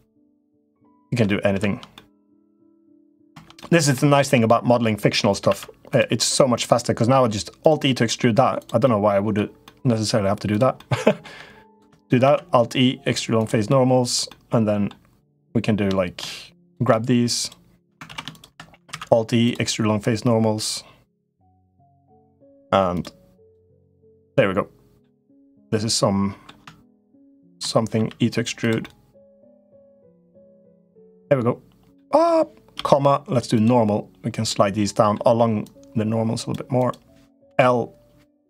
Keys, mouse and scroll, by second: 1.0 middle click, 1.7 middle click, 2.6 middle click, 3.3 middle click, 3.9 shift+click, 4.2 middle click, 5.2 alt+e, 7.7 middle click, 8.6 middle click, 9.4 middle click, 10.5 middle click, 11.4 shift+click, 12.0 alt+e, 14.0 middle click, 15.2 click, 17.2 shift+click, 17.8 ctrl+z, 18.0 click, 18.6 alt+e, 21.6 middle click, 23.5-24.7 middle drag, 25.1 click, 25.4 middle click, 27.1 shift+click, 27.7 e, 28.6-29.7 middle drag, 30.5 middle click, 31.8 middle click, 34.3 middle click, 35.4 click, 37.2 l.